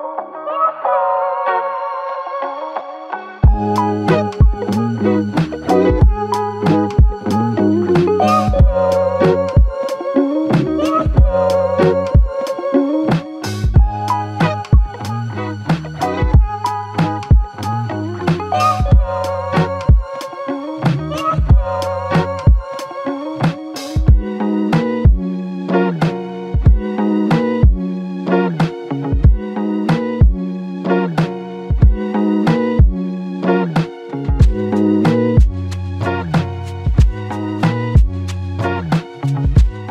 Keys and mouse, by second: 4.4 shift+click, 5.3 shift+click, 5.4 shift+click, 7.0 shift+click, 8.2 alt+click, 13.0 shift+click, 14.1 alt+click, 19.2 shift+click, 20.2 alt+click, 23.0 alt+click, 28.1 double click, 29.1 alt+click, 29.9 ctrl+click, 30.8 ctrl+i, 31.6 ctrl+click, 34.8 alt+click, 36.3 alt+l, 36.5 ctrl+click, 37.4 ctrl+i.